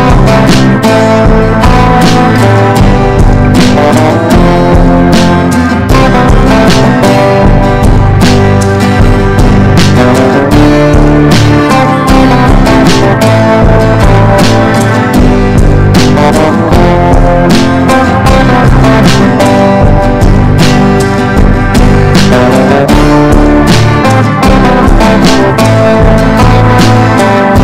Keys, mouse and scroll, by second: 4.0 right click, 4.5-9.2 drag, 9.2 BackSpace, 10.0 KP_3, 10.2 KP_1, 10.4 KP_6, 10.9 Return, 12.1 click, 14.6 shift+click, 15.3 shift+click, 16.0 shift+click, 16.7 shift+click, 17.7 click, 20.9 Delete, 21.5 Delete, 21.8 click, 21.9 Delete, 22.4 click, 22.6 Delete, 23.0 Delete, 23.8 Delete, 24.3 click, 24.4 Delete, 24.9 Delete, 25.2 click, 25.4 Delete, 25.8 Delete, 27.3 click.